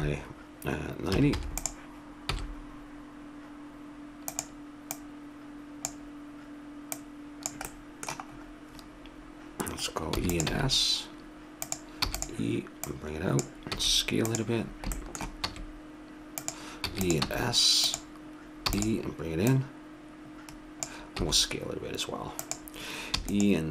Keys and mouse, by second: 2.3 s, 4.9-6.6 drag, 6.9-8.9 drag, 7.7-9.9 middle drag, 7.7 right click, 10.1 e, 10.5 s, 12.0 e, 12.9-14.6 drag, 13.8 s, 14.7 middle click, 15.4 s, 16.8 e, 17.3 s, 18.6 e, 19.4 click, 21.2 s, 23.1 e.